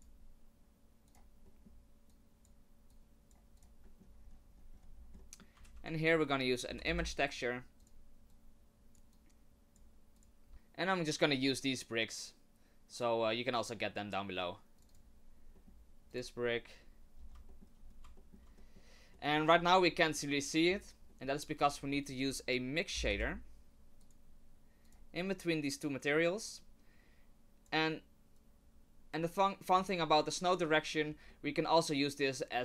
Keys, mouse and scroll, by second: 1.5 middle click, 2.1 click, 2.9 click, 3.6 click, 3.8 middle click, 4.2-5.5 scroll up 12, 5.2 middle click, 5.6 shift+a, 8.3 click, 9.1 click, 10.2 click, 15.0 click, 15.5 middle click, 16.1 click, 17.2 scroll down 5, 17.5 shift+middle click, 17.8-18.2 scroll up 2, 18.2 shift+middle click, 18.6 middle click, 19.1 middle click, 19.6-20.5 scroll down 10, 20.2 middle click, 21.1 middle click, 21.7 shift+a, 25.9 click, 28.4 click, 29.1 middle click, 29.1-29.4 scroll up 5, 30.7 middle click, 31.0 scroll down 3, 31.3 middle click, 32.5 click.